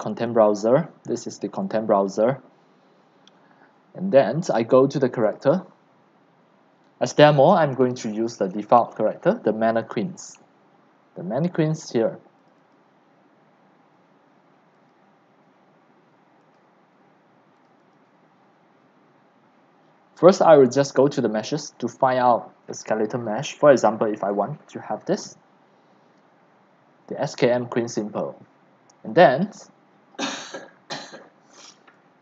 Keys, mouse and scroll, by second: 0.2 click, 0.3 right click, 5.4 click, 12.5 click, 14.7 click, 16.4 click, 17.6 click, 21.1 click, 21.2 click, 24.2 click, 24.4 click, 29.2 click, 29.8 drag, 30.5 click.